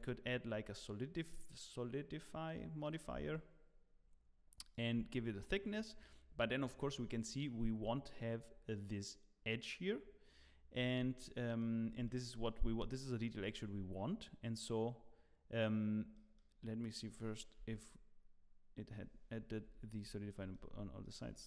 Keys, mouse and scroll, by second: 1.5 click, 3.3 shift+click, 6.5-9.7 scroll down 1, 10.7 scroll down 3, 11.1 shift+middle click, 12.1 shift+middle click, 12.5 scroll up 8, 12.9 shift+middle click.